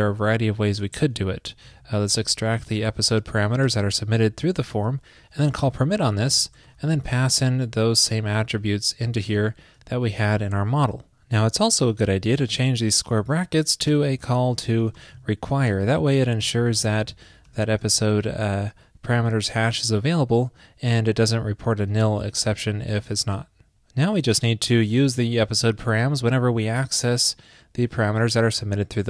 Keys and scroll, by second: 1.0 ctrl+p, 2.8 super+Right, 7.1 super+v, 8.9 super+Right, 9.1 shift+super+Left, 12.4 alt+Right, 16.8 alt+Right, 23.0 super+s, 25.5 super+c.